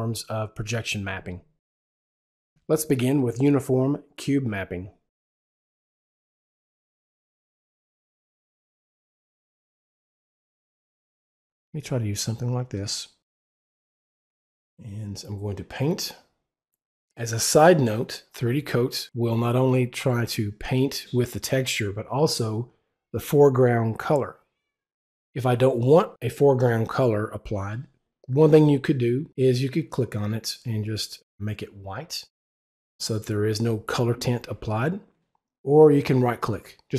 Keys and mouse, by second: 7.3 w, 11.6 click, 13.6 right click, 29.7 right click, 30.1 click, 31.5 click, 32.5 click, 35.3 click, 36.3 right click.